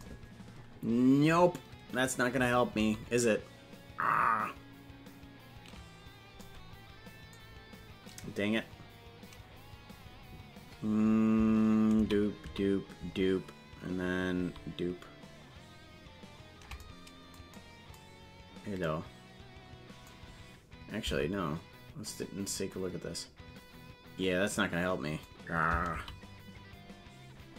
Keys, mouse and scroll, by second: 18.2 ctrl+z, 21.6 Tab.